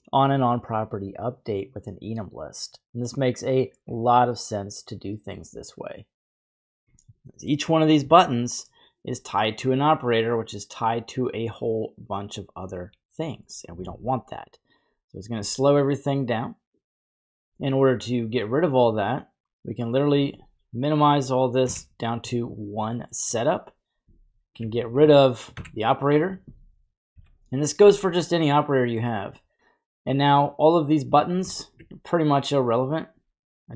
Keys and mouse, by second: 3.9-5.3 middle drag, 12.2-13.2 drag, 13.2 g, 14.7 click, 14.7 typing, 16.7 click, 18.9-20.2 drag, 21.6 Delete, 23.0 middle click, 24.5 ctrl+click, 24.8 click, 25.5 Delete, 27.1 n, 28.0 middle click, 31.7 ctrl+click, 32.7-33.7 drag.